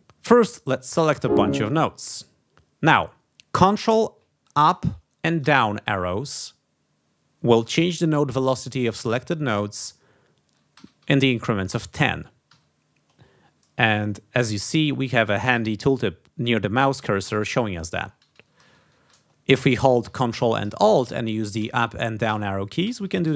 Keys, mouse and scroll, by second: 0.7 click, 1.1 click, 4.5 ctrl+Up, 5.4 ctrl+Down, 10.7 ctrl+Up, 11.7 ctrl+Up, 12.4 ctrl+Down, 18.0 ctrl+Down, 18.6 ctrl+Up, 21.5 ctrl+alt+Up, 22.2 ctrl+alt+Down.